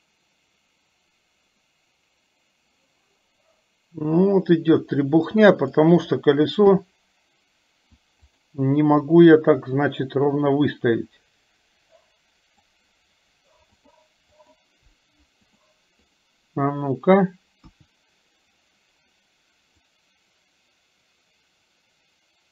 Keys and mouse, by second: 6.7 KP_7, 8.4 click, 9.2 click, 9.6-12.7 drag, 14.5 click, 16.1 click, 17.6 KP_1, 20.0-22.5 drag.